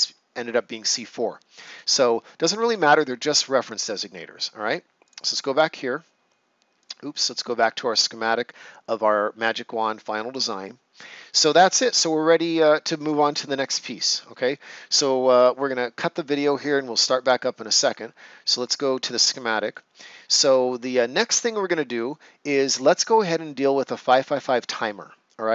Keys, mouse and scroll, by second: 2.3-2.6 ctrl+scroll up 1, 5.0 click, 9.9 right click, 11.2 ctrl+scroll down 1, 13.6 right click, 18.6 click, 20.1 ctrl+scroll down 1, 20.7 right click.